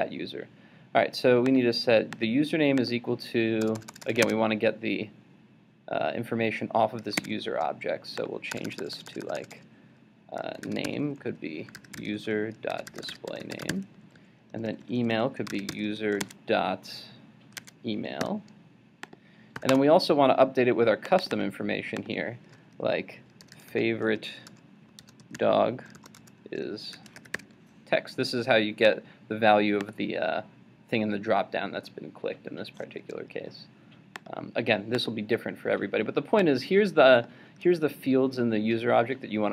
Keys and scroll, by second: 4.2 super+Tab, 7.2 super+Tab, 7.3 super+Tab, 16.2 super+Tab.